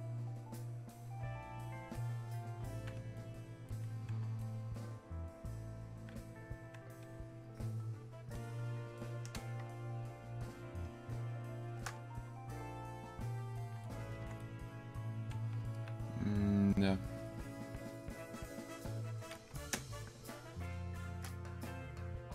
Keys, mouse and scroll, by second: 8.4 click, 9.4 space, 10.1 click, 10.4 space, 12.4-18.8 drag, 19.8 space, 20.4 click, 20.5 space, 21.8-22.3 drag.